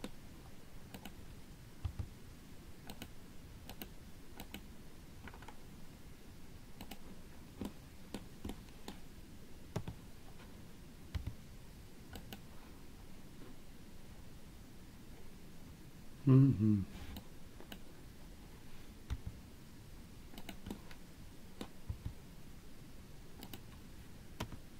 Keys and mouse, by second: 3.1 g, 4.7 click, 8.0 middle click, 8.8 middle click, 10.2 KP_3, 17.6 click, 20.9 middle click.